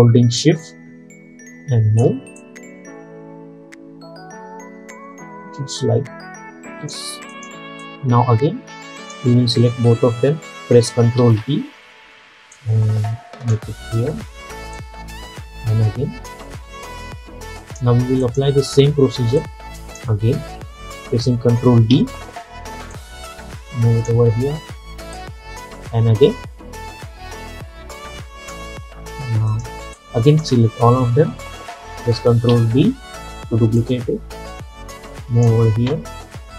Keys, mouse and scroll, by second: 0.5-11.3 shift+drag, 11.3 ctrl+d, 12.6-22.0 drag, 22.0 ctrl+d, 23.0-28.9 drag, 28.9-29.5 scroll down 1, 29.6-32.6 drag, 32.6 ctrl+d, 33.9-36.5 drag.